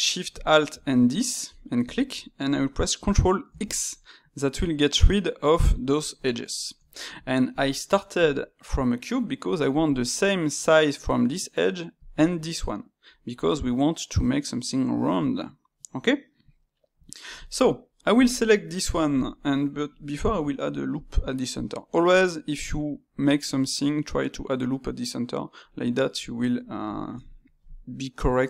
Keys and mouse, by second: 0.3 alt+shift+click, 0.8-3.4 middle drag, 3.4 ctrl+x, 6.5-9.9 middle drag, 9.9-13.0 drag, 13.0-16.1 middle drag, 16.5-18.1 middle drag, 18.1 click, 18.7-20.2 ctrl+middle drag, 20.2 ctrl+r, 22.3-25.3 middle drag, 26.3-28.4 middle drag.